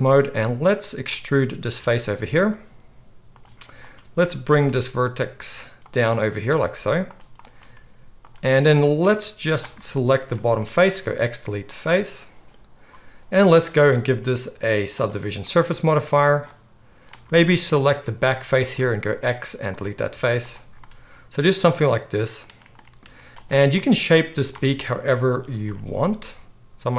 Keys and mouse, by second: 0.4-2.5 middle drag, 1.8 e, 2.5 click, 3.4-4.6 middle drag, 4.6 g, 5.9 click, 6.6 g, 7.2 click, 7.7 g, 8.3 click, 10.4 x, 19.0 x, 20.1 z, 20.6-26.9 middle drag, 23.0 z, 25.3 s.